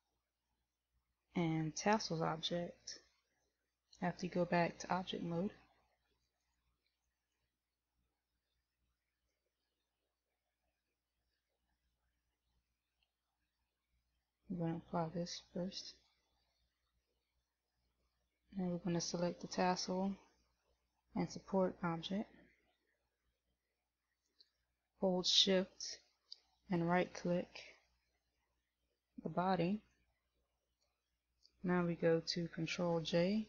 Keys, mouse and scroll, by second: 6.6 click, 13.7 click, 17.9 right click, 19.1-20.2 scroll down 5, 29.8 shift+right click.